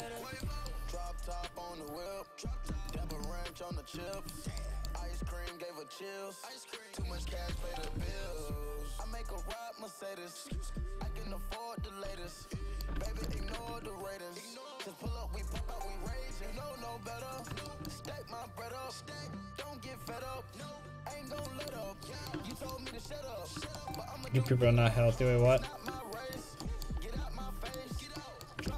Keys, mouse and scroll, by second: 5.6-8.5 drag, 8.1 alt+z, 12.3 a, 13.6 ctrl+Tab, 15.3 click, 16.1 click, 16.5 click.